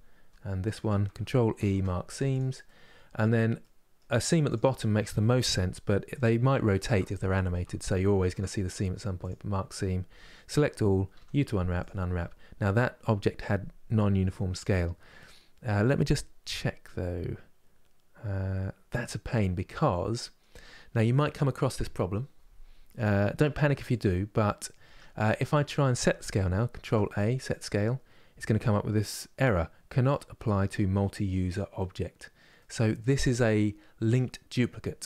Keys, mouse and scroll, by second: 0.3 shift+click, 2.0 ctrl+e, 2.3-4.2 middle drag, 4.2 click, 5.2 2, 5.9 click, 6.1-8.9 shift+middle drag, 8.9 ctrl+e, 9.7 a, 11.5 u, 19.0-19.4 scroll down 1, 19.4-23.6 middle drag, 23.6-24.1 scroll down 1, 24.1 middle click, 24.5 Tab, 24.9-35.0 middle drag.